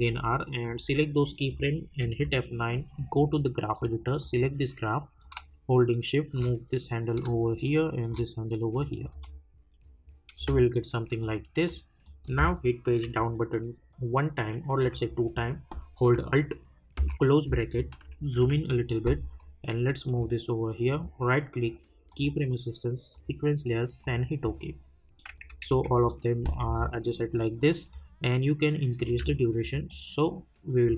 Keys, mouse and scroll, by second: 0.6 click, 2.0 F9, 2.9-8.7 drag, 9.1 space, 11.2 click, 13.0 Page_Down, 16.9 alt+], 19.4 click, 20.9 right click, 22.1 click, 26.7 scroll up 1, 27.9 click, 29.1 space.